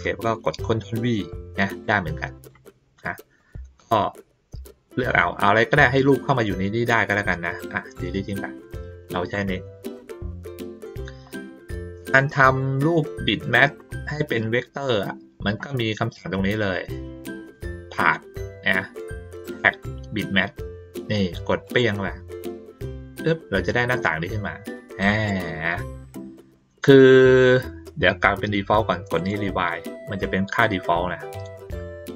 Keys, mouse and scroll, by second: 1.8 click, 2.9 click, 3.4 click, 9.3 click, 11.0 ctrl+middle click, 11.0-11.6 ctrl+scroll up 2, 11.3 ctrl+middle click, 12.6 middle click, 13.6 ctrl+middle click, 14.3 ctrl+middle click, 14.4 ctrl+middle click, 17.5 click, 21.6 click, 23.9-25.2 drag, 29.1 click.